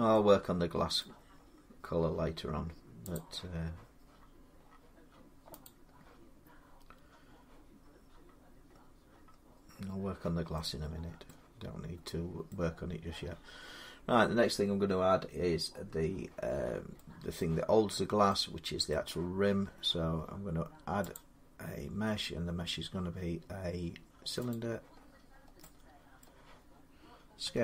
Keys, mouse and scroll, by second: 0.8 middle click, 1.1-2.5 scroll up 6, 3.0 click, 3.5 scroll up 1, 4.0-4.4 scroll down 4, 4.4-5.3 scroll up 2, 5.4 click, 8.1-9.0 scroll down 6, 8.9 scroll up 2, 9.0 scroll down 2, 11.1 middle click, 11.5 scroll up 10, 12.3 middle click, 12.3 scroll up 1, 16.0 middle click, 17.2 middle click, 18.7 middle click, 20.9 click, 24.3 click, 24.8-25.4 scroll, 26.0 middle click, 27.2-27.6 typing.